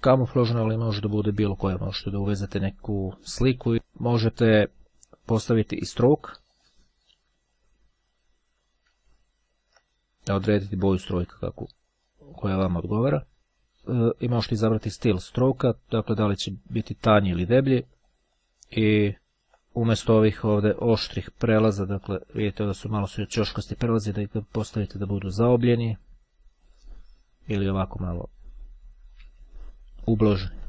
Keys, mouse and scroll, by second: 0.2-0.8 ctrl+scroll down 1, 1.6-2.2 ctrl+scroll up 1, 3.7 click, 5.4 click, 6.4 click, 9.4-10.4 ctrl+scroll up 2, 10.6-12.4 drag, 12.6-13.8 drag, 16.0-19.0 drag, 19.4-19.8 ctrl+scroll up 1, 24.6 click, 26.4-27.4 drag, 29.8-30.2 ctrl+scroll up 2.